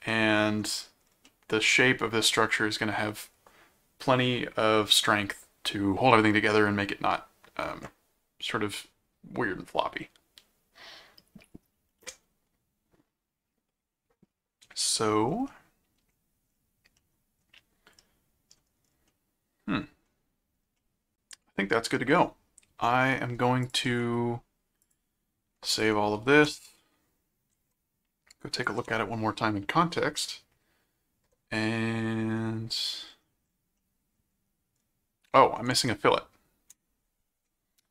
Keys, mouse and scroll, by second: 0.1 middle click, 1.2-2.9 middle drag, 15.5 middle click, 17.0 middle click, 18.0 middle click, 19.1 middle click, 20.8-21.9 middle drag, 22.1 middle click, 23.6 ctrl+click, 23.9 ctrl+s, 24.8 click, 25.7 ctrl+click, 26.3 ctrl+7, 27.5 ctrl+Tab, 28.6 ctrl+Tab, 33.7 middle click, 36.2 ctrl+Tab.